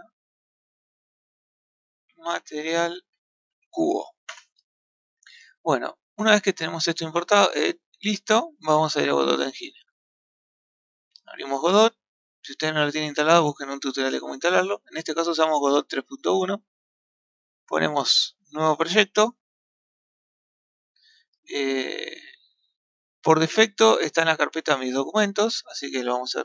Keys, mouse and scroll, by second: 0.6-3.6 drag, 5.1-5.6 scroll down 2, 5.6 middle click, 7.7-8.7 middle drag.